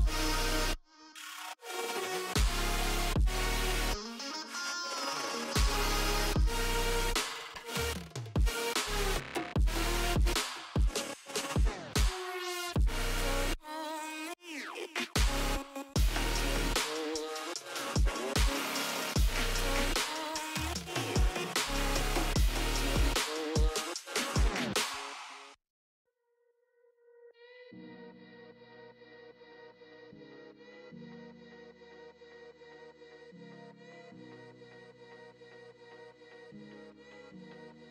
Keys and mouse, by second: 1.3 click, 2.7 click, 3.7 click, 8.9 Caps_Lock, 11.7 click, 12.3 click, 13.7 click, 15.4 ctrl+/, 15.6 ctrl+z, 16.3 click, 17.0 click, 17.2 Caps_Lock, 17.9 click, 18.7 click, 19.6 click, 20.3 click, 20.5 click, 20.7 click, 21.4 click, 21.9 click, 22.8 space, 23.3 shift+click, 25.2 click, 26.6 click, 29.6 click, 36.2 click.